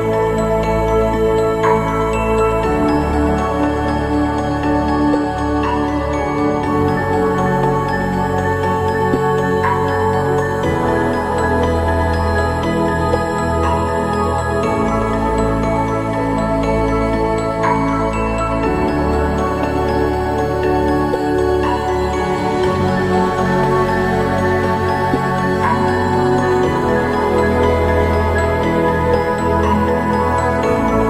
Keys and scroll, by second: 3.8 ctrl+-, 11.0 ctrl+=, 11.2 ctrl+=, 17.9 ctrl+-, 18.4 ctrl+-, 29.8 ctrl+-.